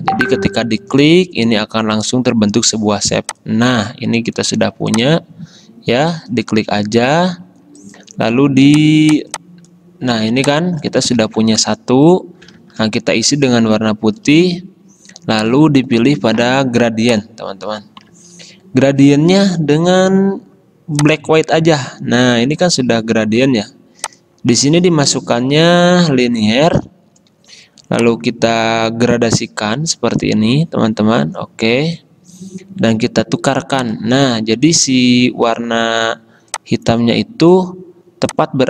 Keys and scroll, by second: 11.4 ctrl+z, 12.7 shift+x, 26.9 g.